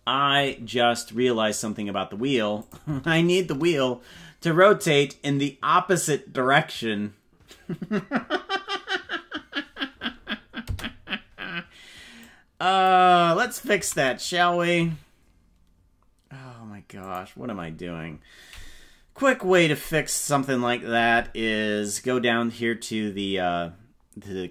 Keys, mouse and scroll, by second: 2.6 click, 2.8 space, 10.6 space, 12.2 click, 13.7 a, 14.9 g.